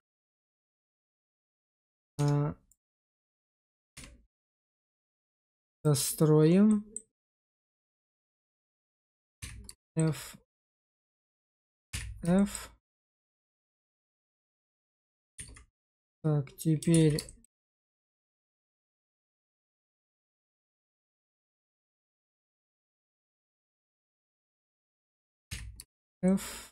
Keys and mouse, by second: 0.1 Tab, 1.3 middle click, 2.0 Tab, 2.6 click, 3.8 1, 4.8-5.9 drag, 6.6 middle click, 7.2 click, 9.3 f, 9.7 shift+middle click, 11.8 f, 12.2 shift+click, 12.7 click, 13.4 Tab, 14.2 shift+z, 14.5 shift+middle click, 14.8 Tab, 15.3 shift+z, 15.8 middle click, 16.8 alt+z, 17.1 shift+middle click, 17.5-18.7 middle drag, 19.1 middle click, 20.8 middle click, 21.5 shift+click, 23.0 shift+click, 23.6 middle click, 24.1 alt+z, 25.4 f, 25.8 shift+middle click, 26.1 middle click.